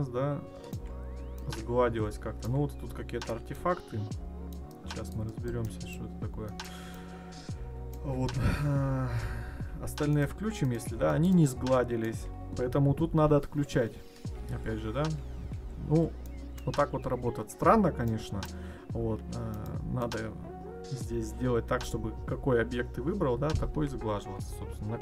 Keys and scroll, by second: 8.9 ctrl+z, 13.8 ctrl+z.